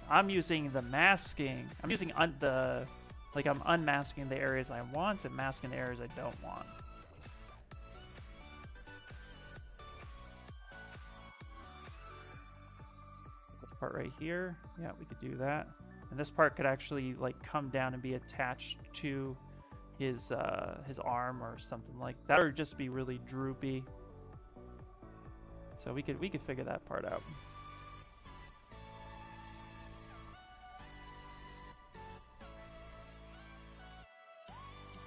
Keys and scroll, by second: 14.9 s, 27.7 ctrl+z, 28.0 ctrl+z, 29.8 s, 30.1 s.